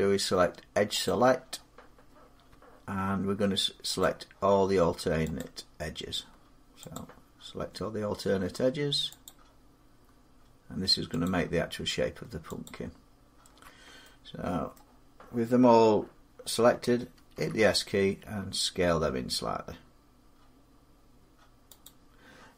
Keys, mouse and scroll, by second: 0.9 click, 3.8 alt+click, 5.2 click, 6.8 click, 9.1 click, 11.2 click, 12.5 click, 13.8 middle click, 14.6 middle click, 14.7-17.2 scroll, 17.2 s, 21.7 click.